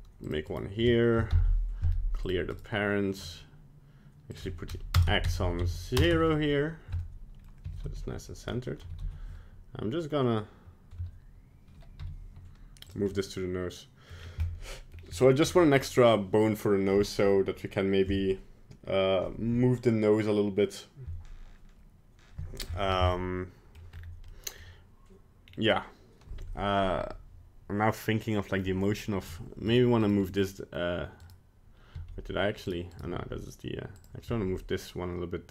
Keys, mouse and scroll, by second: 0.5 right click, 1.3 alt+p, 2.5 right click, 4.3 click, 5.3 Tab, 5.5 Tab, 7.0 middle click, 7.6 f, 8.6 middle click, 8.9 g, 13.1 middle click, 14.1 middle click, 14.2-15.0 scroll down 3, 14.5 middle click, 15.1-15.5 scroll up 2, 15.5 middle click, 23.2 middle click, 24.0 scroll up 3, 24.3 middle click, 25.5 scroll down 2, 29.7 right click, 30.0 right click, 30.3 middle click, 31.2 right click, 32.0 g, 33.0 right click, 33.1 g, 34.3 g.